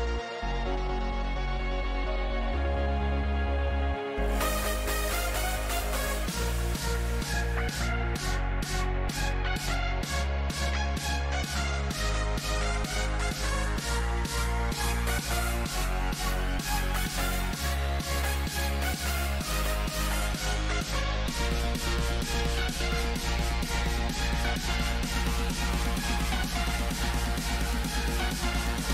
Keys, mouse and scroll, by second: 1.2-13.0 right drag, 9.5-14.6 middle drag, 23.6 KP_7, 27.0-28.9 middle drag.